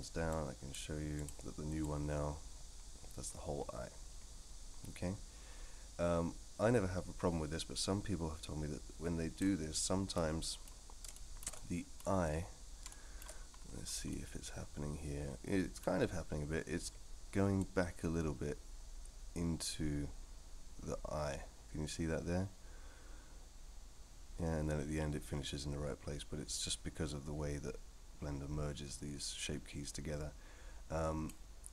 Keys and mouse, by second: 0.4 click, 1.2 click, 1.9-9.4 drag, 10.1-10.7 middle drag, 11.1 shift+middle drag, 11.5-12.0 middle drag, 12.9-13.2 shift+middle drag, 14.1-15.8 middle drag, 17.6-31.3 drag.